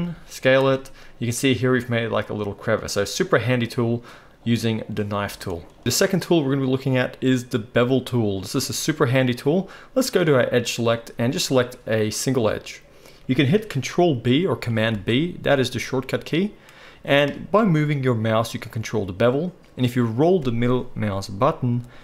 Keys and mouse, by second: 0.0-11.4 middle drag, 0.0 s, 5.8 ctrl+z, 5.8 alt+a, 11.4-12.4 drag, 12.4-22.0 middle drag, 14.9 ctrl+b.